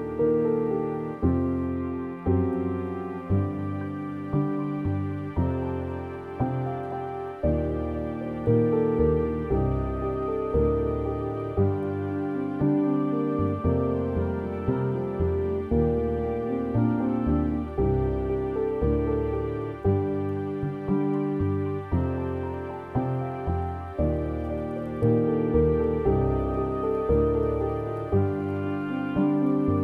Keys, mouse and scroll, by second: 0.1-1.1 middle drag, 1.1-2.4 scroll down 3, 2.4-3.8 scroll down 1, 3.8 click, 4.4-4.8 scroll down 3, 4.8 middle click, 5.3-5.8 scroll up 7, 5.8 middle click, 6.7-7.0 scroll down 3, 7.0-20.2 middle drag, 20.2 click, 23.7 click, 28.4-28.8 scroll down 6.